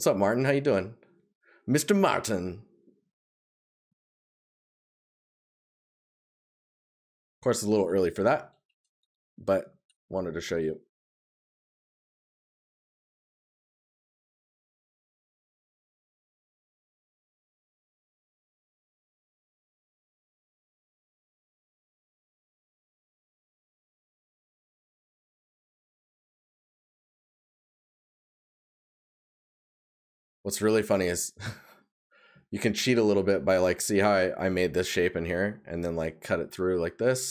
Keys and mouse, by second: 5.7 right click, 11.0 right click, 13.2 right click, 27.7 right click.